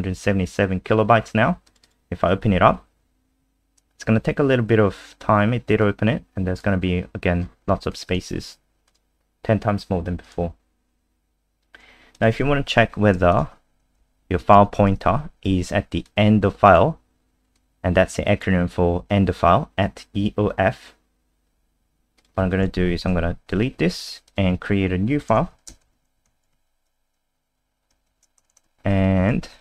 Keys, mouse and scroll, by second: 1.7 click, 1.8 click, 5.8 click, 6.8-7.9 scroll down 11, 7.9 click, 12.3 ctrl+c, 12.7 click, 13.3 shift+click, 13.9 shift+Right, 14.5 ctrl+v, 16.1 click, 22.8 End, 22.9 Home, 23.3 Delete, 24.3 click, 25.3 Return, 25.5 /, 25.8 *, 26.3 ctrl+s, 26.5 F5, 28.1 shift+Home, 28.4 BackSpace, 28.5 BackSpace, 29.2 Home, 29.4 ;.